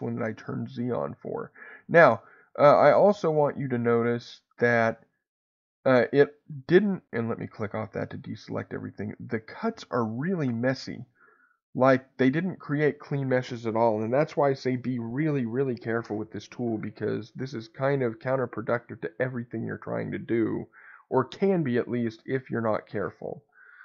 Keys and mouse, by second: 1.8 middle click, 3.4-4.5 middle drag, 8.7 shift+middle click.